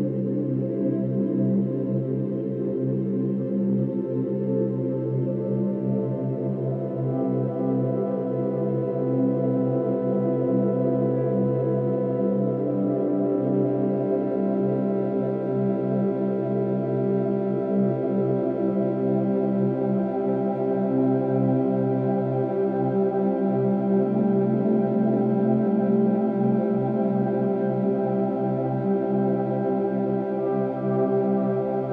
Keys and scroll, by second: 5.5 ctrl+d, 30.3 space, 30.9 ctrl+-, 31.4 space.